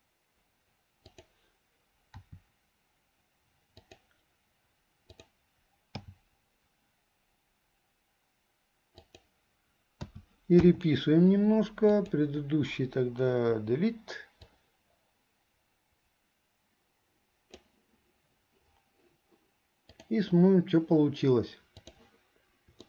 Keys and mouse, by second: 1.1 click, 2.3 r, 5.1 click, 10.3 a, 10.9 i, 11.9 click, 13.7 Delete, 14.7-17.8 drag, 20.0-22.0 drag.